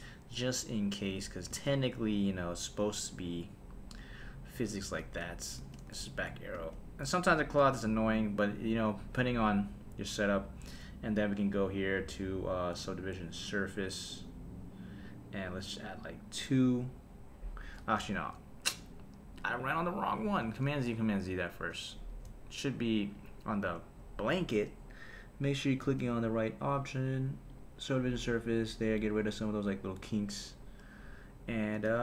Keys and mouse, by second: 1.6 space, 5.0 space, 5.6 space, 6.0 shift+Left, 6.5 space, 7.6 space, 11.2 click, 12.0-14.3 drag, 16.4 click, 18.1 super+z, 18.8 click, 20.4 super+z, 21.9 super+z, 23.1 click, 24.0 shift+Left, 24.5 space, 25.8 space, 26.7-27.6 drag, 29.1 click, 31.8 space.